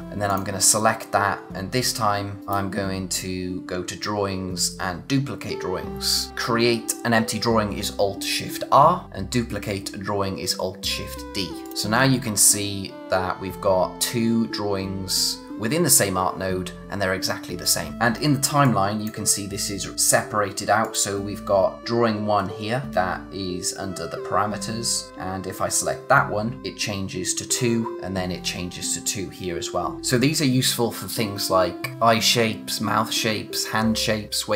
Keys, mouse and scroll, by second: 0.0 click, 2.4 right click, 11.6 click, 18.6 click, 26.6 click, 30.0 click.